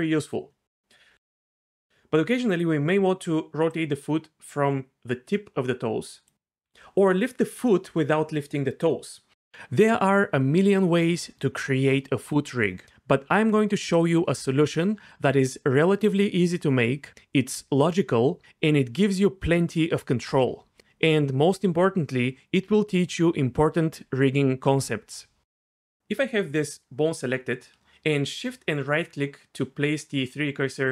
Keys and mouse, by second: 1.3 alt+g, 1.9 d, 3.2-6.3 d, 6.6 d, 21.8 g, 23.2-23.7 right drag, 25.8 g, 27.2-27.7 right drag, 29.4 shift+right click.